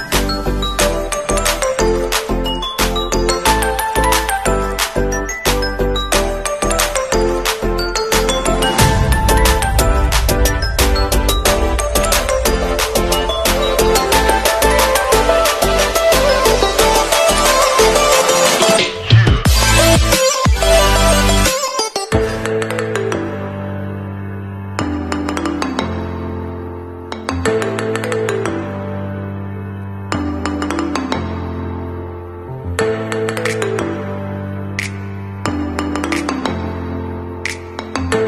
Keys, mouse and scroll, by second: 10.6 ctrl+shift+i, 11.9 click, 15.5 ctrl+z, 17.0 ctrl+shift+i, 18.0 click, 20.0 scroll down 1, 21.3 click, 34.5 ctrl+d, 35.2 click, 35.7 alt+scroll down 1, 36.7 scroll down 1, 36.8 scroll up 1, 37.4 alt+scroll up 1.